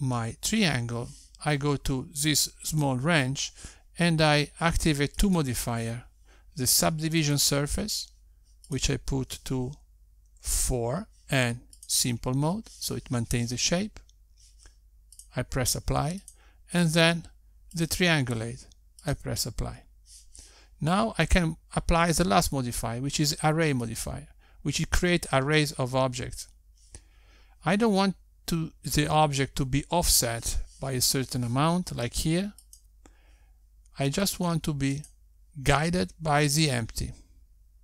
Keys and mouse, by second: 3.6 click, 6.0 click, 9.7 click, 12.7 click, 16.2 click, 17.2 click, 20.0 click, 22.1 click, 33.7 click, 35.1 click, 35.8 click.